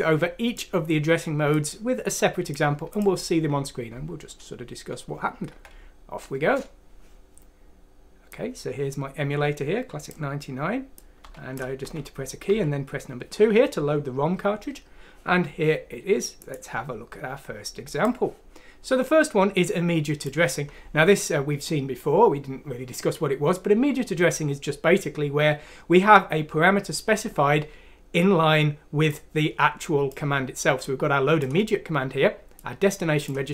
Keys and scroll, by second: 5.5 F6, 6.4 Return, 11.2-12.4 typing.